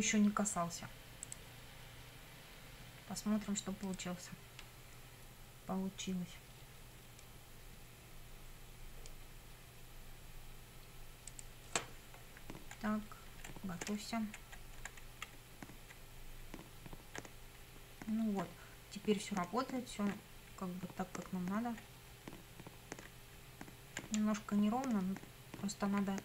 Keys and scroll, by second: 12.4 Up, 12.9 Right, 13.4 Up, 13.9 Right, 14.4 Up, 15.1 Left, 15.4 Up, 24.2 Down.